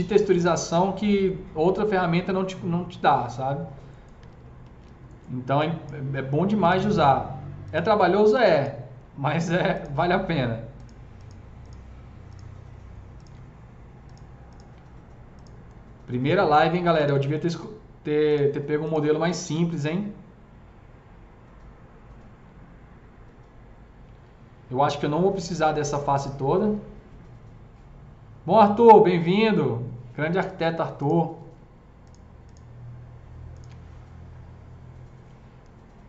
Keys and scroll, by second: 4.2 ctrl+z, 4.6 ctrl+z.